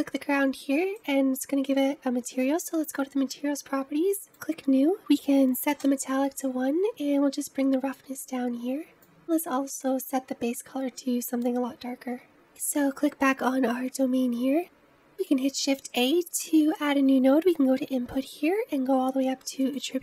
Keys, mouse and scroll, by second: 1.3 click, 4.2-9.4 drag, 12.5 click, 14.6-17.2 scroll down 1, 17.2-19.7 middle drag.